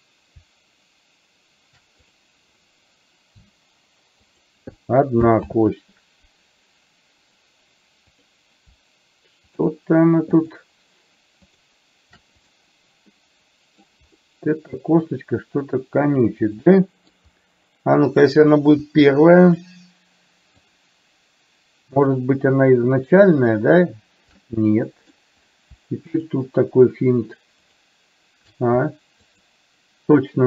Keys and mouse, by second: 2.1 click, 5.4 ctrl+z, 8.2 click, 9.6 shift+click, 11.6 shift+click, 13.3 middle click, 16.8 middle click, 20.7 shift+click, 22.1 shift+click, 23.4 shift+click, 24.4 middle click, 26.2 shift+click, 27.7 shift+click, 29.3 shift+click.